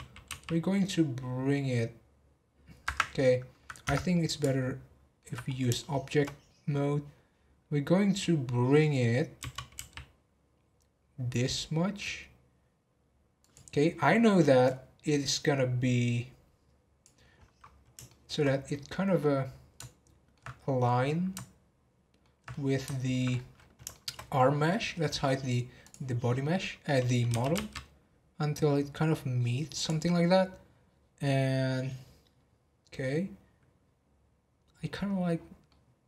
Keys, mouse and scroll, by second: 3.1 middle click, 3.8 Tab, 4.1-5.4 middle drag, 5.4-5.7 scroll up 1, 5.7 shift+middle click, 6.3-9.4 scroll up 1, 9.4 g, 17.3-17.8 scroll up 8, 18.0-20.5 middle drag, 20.5-20.9 scroll down 6, 21.0-23.3 middle drag, 23.3-23.7 scroll up 10, 23.9 shift+middle drag, 24.3 scroll up 1, 24.8 scroll down 4, 25.4-25.8 scroll down 4, 25.8 click, 34.7-35.1 scroll down 2, 35.3 scroll down 10, 35.6-36.0 middle drag.